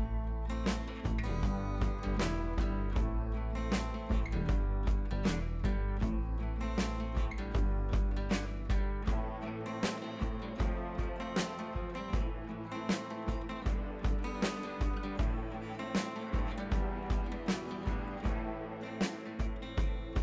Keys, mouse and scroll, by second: 0.0 scroll up 1, 0.9 click, 1.3 scroll down 1, 1.8 scroll up 1, 2.7 click, 5.8 scroll down 1, 6.1 scroll up 1, 7.0 click, 7.6 scroll down 1, 8.0 scroll up 1, 8.7 click, 9.7 scroll down 1, 10.7 shift+F4, 11.0 scroll up 1, 11.4 scroll down 1, 12.5 shift+F4, 13.0-13.6 scroll up 2, 15.1 click.